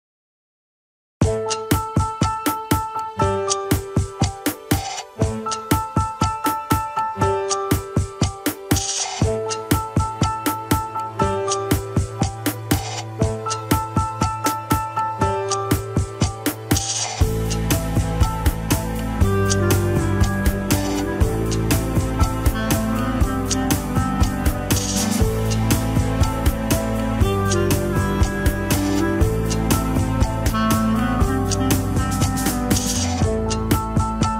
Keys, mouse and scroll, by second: 0.1 ctrl+click, 1.2 ctrl+click, 2.7 alt+z, 3.6 ctrl+click, 3.8-5.6 middle drag, 5.6 ctrl+click, 6.8 ctrl+click, 6.8 alt+z, 7.0-9.6 middle drag, 10.1-11.3 drag, 11.3-12.5 middle drag, 12.5 click, 13.0-13.9 scroll up 1, 13.9 ctrl+click, 14.0 scroll up 1, 14.3-15.8 middle drag, 15.8 ctrl+click, 17.3 ctrl+click, 18.7 ctrl+click, 19.5 alt+z, 20.6 ctrl+click, 21.6 ctrl+click, 22.1 alt+z, 22.2 scroll up 1, 23.5 ctrl+click, 23.8-24.8 scroll down 3, 24.8 ctrl+click, 24.8-26.7 middle drag, 26.7 ctrl+Tab, 27.2 KP_1, 27.4-28.0 scroll down 4, 28.0 click, 28.7 ctrl+Tab, 29.1 a, 29.5 alt+r, 29.8 scroll down 3, 29.9-30.8 shift+middle drag, 30.8 click, 31.5 g, 32.8-33.5 scroll up 3, 33.0 shift+middle drag, 33.9 ctrl+Tab, 34.1 click.